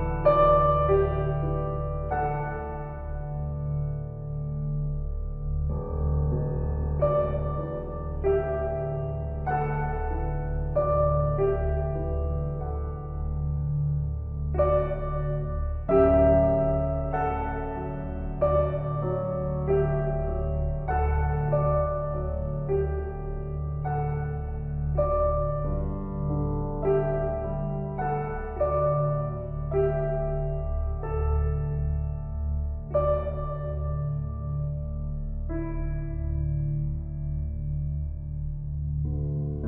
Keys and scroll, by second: 39.1 [.